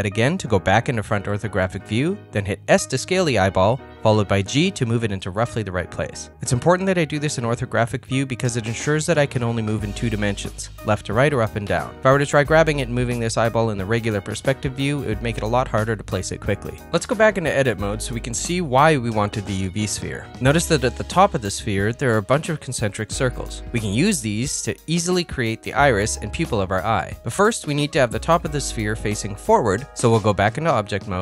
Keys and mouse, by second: 1.0 KP_1, 2.5 s, 4.7 g, 13.9 middle click, 15.4 KP_Decimal, 17.9 ctrl+middle click, 18.6 Tab, 25.3 Tab, 26.1 middle click, 26.7 ctrl+middle click, 29.2 ctrl+middle click, 29.5 middle click, 30.0 middle click, 30.6 middle click.